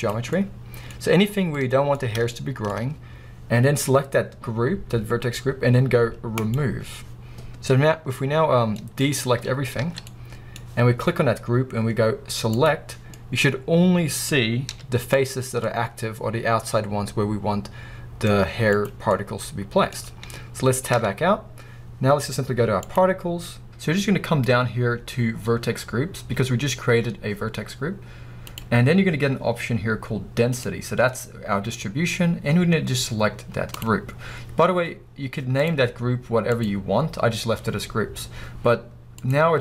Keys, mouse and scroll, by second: 0.1 z, 0.5-1.4 middle drag, 0.9-1.4 scroll up 2, 1.4 scroll down 1, 1.6-6.5 middle drag, 6.5-8.7 drag, 7.4-8.0 scroll down 1, 8.7-12.6 middle drag, 9.0-9.7 scroll up 3, 9.8 alt+a, 12.6 click, 13.2-15.2 middle drag, 15.2 z, 15.6-19.8 middle drag, 18.9 z, 21.0 Tab, 29.7-33.9 middle drag, 33.9-39.6 drag.